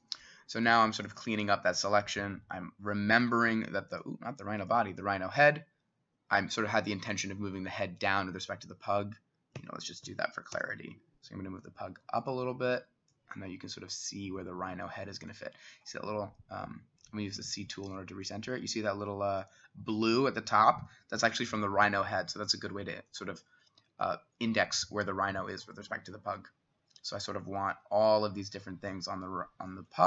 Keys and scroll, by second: 9.6 Escape, 10.6 Escape, 10.6 t, 17.4 c, 27.7 s.